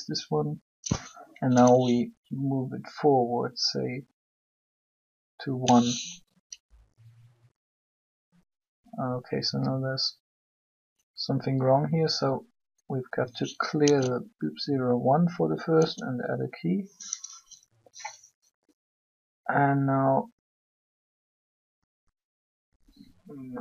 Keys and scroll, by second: 13.7 alt+g, 17.2 i.